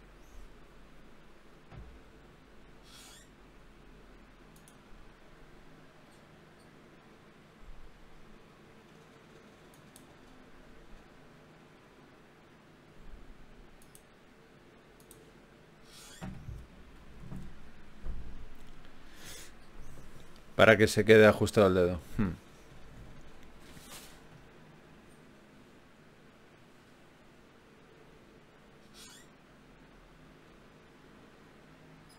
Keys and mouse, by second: 1.5 middle click, 4.8 f, 8.3 f, 9.7 ctrl+Tab, 14.0 ctrl+z, 14.4 ctrl+z, 14.7 ctrl+z, 15.0 ctrl+z, 15.2 ctrl+z, 17.8 ctrl+r, 19.2 ctrl+r, 22.4-24.2 right drag, 24.8 g, 27.0 ctrl+Tab, 28.0-29.0 drag, 29.0 g, 31.4-32.1 drag.